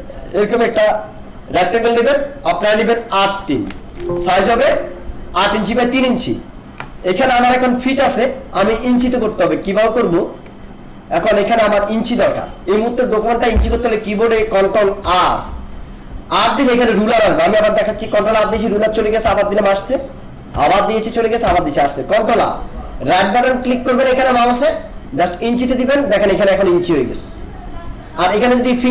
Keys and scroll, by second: 3.8 alt+space, 15.0 ctrl+r, 18.5 ctrl+r.